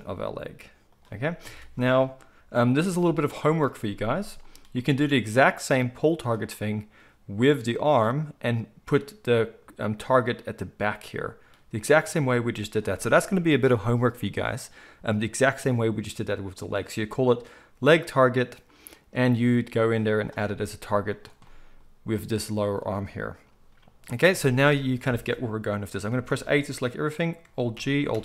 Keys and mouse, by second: 0.0 g, 1.4 a, 5.6-6.5 drag, 6.5-21.1 middle drag, 21.1 click, 21.1-26.1 middle drag, 26.1 a, 27.7 alt+g, 28.1 alt+r.